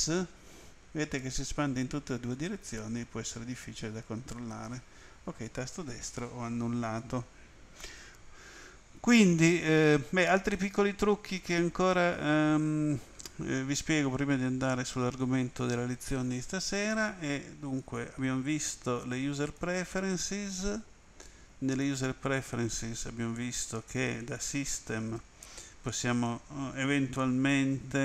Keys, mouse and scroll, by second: 4.3 right click, 10.5 middle click, 15.2 click, 17.8 click, 19.4 click, 21.2 click, 24.2 click, 26.2 click.